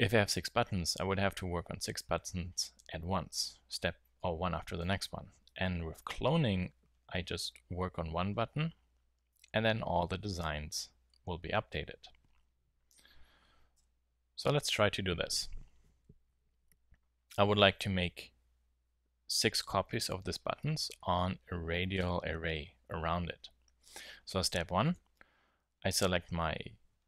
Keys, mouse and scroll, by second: 13.7 KP_7, 24.4-24.9 middle drag, 25.4 z.